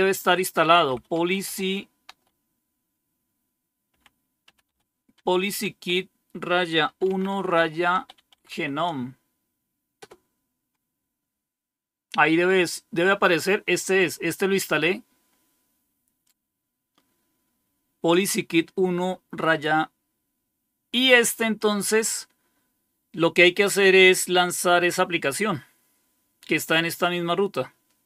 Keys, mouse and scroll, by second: 0.0-2.0 typing, 3.8-9.9 typing, 16.2-18.0 drag, 21.5 click, 26.9-28.0 drag.